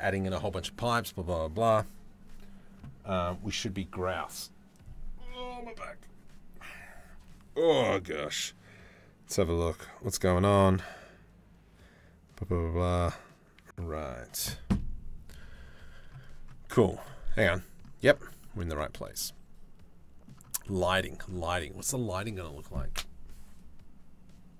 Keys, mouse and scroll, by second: 16.9 middle click, 18.0 middle click, 18.3 shift+middle click, 18.7-20.8 middle drag.